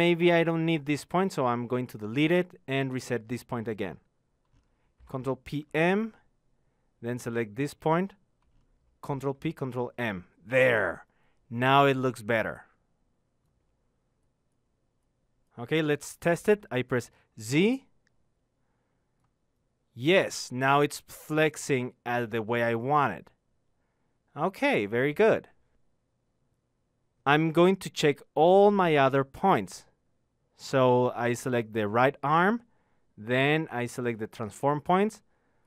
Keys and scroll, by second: 1.3 ctrl+p, 2.5 ctrl+m, 23.0 z.